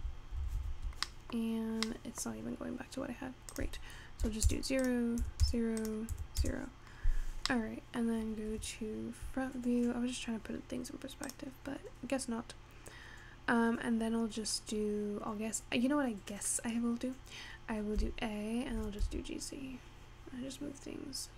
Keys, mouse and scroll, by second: 0.0 ctrl+z, 0.4 ctrl+z, 0.6 ctrl+z, 1.0 scroll down 1, 1.1 middle click, 1.5-2.0 scroll up 5, 2.0 middle click, 2.3-3.5 scroll down 4, 3.6-7.0 drag, 7.0-7.6 scroll up 4, 7.6 middle click, 8.1-8.5 scroll down 2, 10.2-10.5 scroll up 2, 10.5-11.3 scroll down 1, 11.3 click, 18.0 a, 18.8 g.